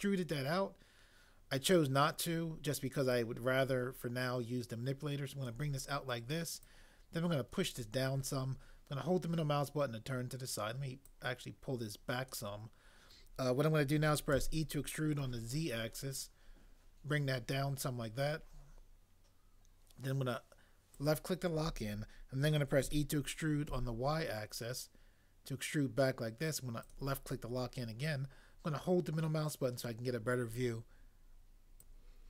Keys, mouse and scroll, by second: 14.4 e, 15.2 z, 22.8 e, 23.7 y.